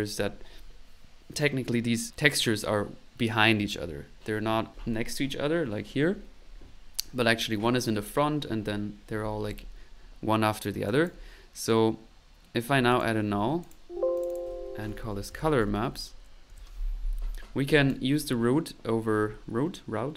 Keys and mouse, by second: 0.0-0.4 typing, 10.8 click, 12.9 click, 13.3 alt+n, 13.6 alt+click, 14.0 alt+click, 17.4 middle click, 17.7 click.